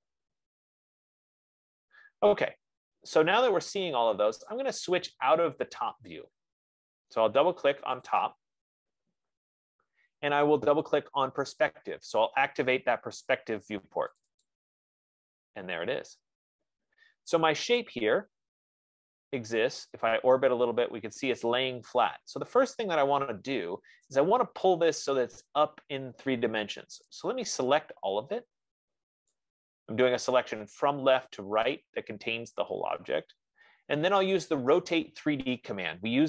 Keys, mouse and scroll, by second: 8.7 click, 8.9 click, 11.8 click, 14.5 click, 15.0 click, 16.2-16.6 scroll, 17.0 F15, 18.4 click, 24.3 right click, 27.6 click, 29.7 click.